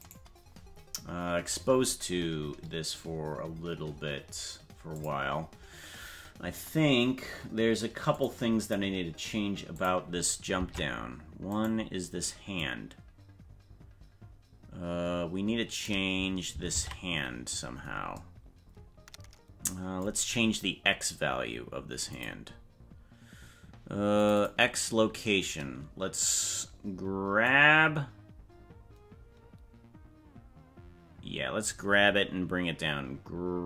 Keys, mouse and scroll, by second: 3.9 scroll down 4, 5.0 click, 8.1 click, 8.6 click, 9.7 click, 10.6 ctrl+Tab, 11.7 right click, 12.6-15.9 drag, 16.7 ctrl+Tab, 22.1 click, 24.2 click, 24.3 click, 27.5-31.7 drag.